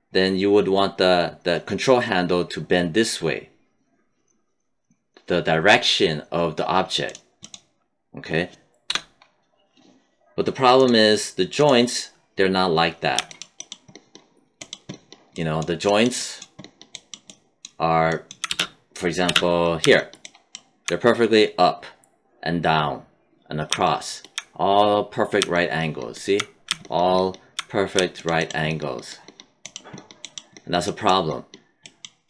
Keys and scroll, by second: 8.8 BackSpace, 18.4 space.